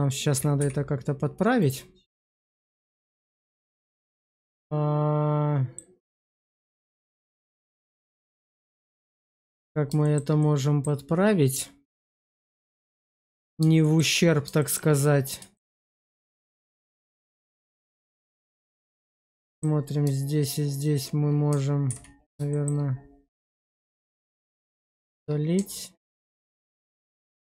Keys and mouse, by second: 0.5 x, 2.1-5.6 middle drag, 6.4 shift+middle click, 6.8-8.7 middle drag, 9.0 shift+middle click, 9.9 shift+middle click, 10.3 middle click, 13.7 shift+middle click, 14.5 shift+middle click, 15.4 shift+middle click, 16.7 Tab, 17.9 click, 18.4 Tab, 19.3 shift+click, 21.8 ctrl+x, 22.4 shift+middle click, 24.8 shift+middle click, 25.8 ctrl+x, 26.3 shift+middle click, 27.0 Tab.